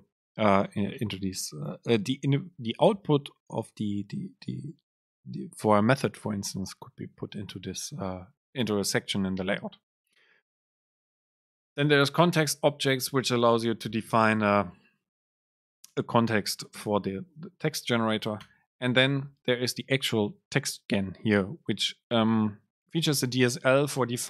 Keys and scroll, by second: 10.6 Down, 11.7 End, 12.3 Return, 15.9 shift+Right, 16.8 BackSpace, 17.4 Down, 18.5 Return, 23.3 super+space.